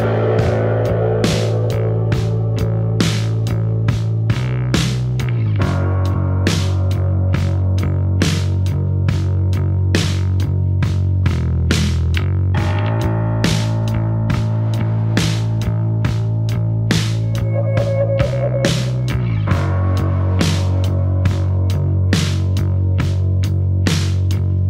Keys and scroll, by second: 0.5 F1, 0.7 Escape, 6.2 Delete, 17.2 Escape.